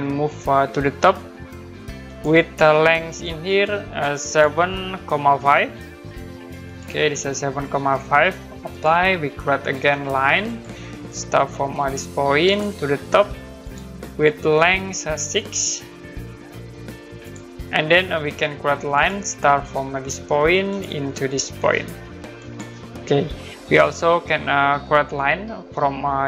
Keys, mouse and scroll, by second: 2.1 click, 3.5 click, 4.9-5.9 typing, 6.6 click, 8.7 click, 10.5 click, 12.5 click, 15.2 click, 16.0 6, 17.2 click, 18.9 click, 20.7 click, 22.4 click, 24.1 scroll up 1, 24.9 scroll down 1.